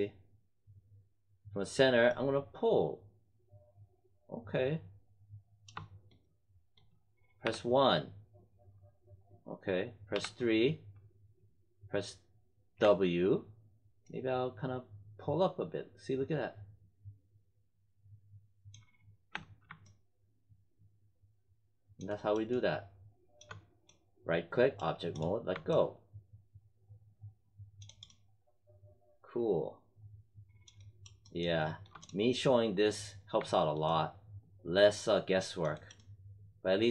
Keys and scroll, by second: 7.4 1, 10.1 3, 12.7 w, 19.2 space.